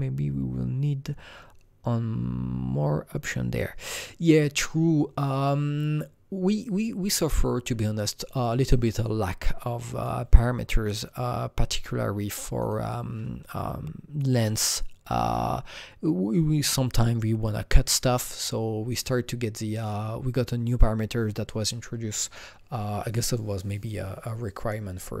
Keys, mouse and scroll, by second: 9.9 click, 11.0 click, 12.5 click, 18.8 click.